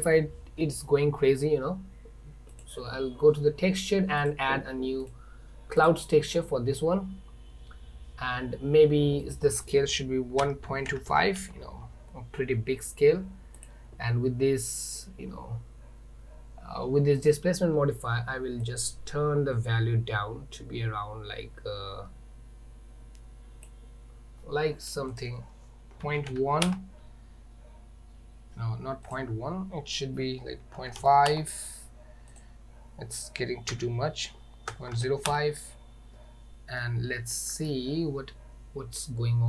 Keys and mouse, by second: 4.3-4.8 drag, 5.2-6.0 drag, 9.5-12.2 drag, 18.9-23.7 drag, 25.2-27.4 drag, 29.1-36.1 drag, 36.9-37.8 middle drag.